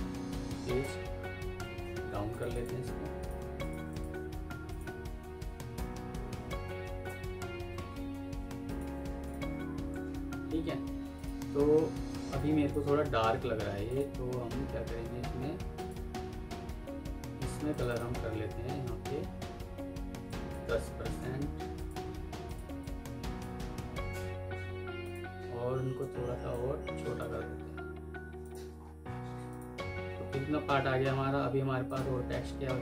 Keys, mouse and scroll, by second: 0.7 shift+Page_Down, 1.7 Escape, 2.4 ctrl+click, 3.2 Escape, 3.8 ctrl+click, 5.6 shift+Page_Down, 6.9 shift+Page_Down, 7.8 Escape, 8.5 ctrl+click, 10.4 F3, 12.7 Escape, 15.6 alt+click, 17.8 double click, 20.8 End, 21.0 Insert, 22.7 double click, 28.7 alt+scroll down 1, 28.9-29.4 alt+scroll up 1, 29.4 alt+click, 29.4 scroll, 30.1-30.4 alt+scroll down 1.